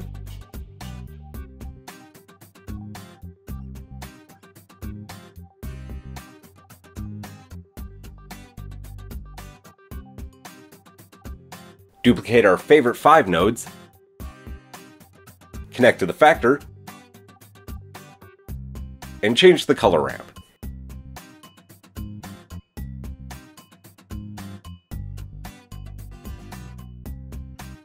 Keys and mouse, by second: 1.2-4.2 drag, 6.7-8.8 drag, 8.8 middle click, 9.2-14.8 drag, 13.7 shift+d, 14.8-15.9 middle drag, 15.9-27.8 drag.